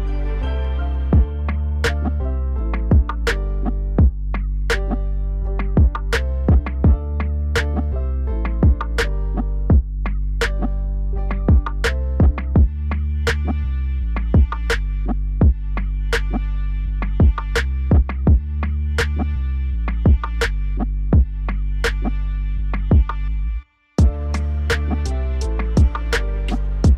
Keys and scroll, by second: 1.5 ctrl+s, 7.5 ctrl+z, 22.7 ctrl+s.